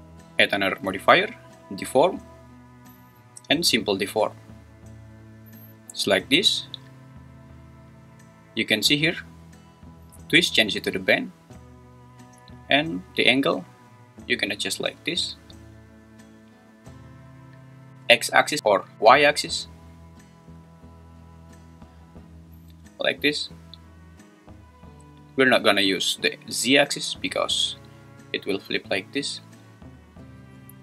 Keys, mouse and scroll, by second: 0.5-4.4 drag, 11.0 click, 13.8-17.9 drag, 20.8-23.6 drag, 26.5 click, 27.7-30.0 drag.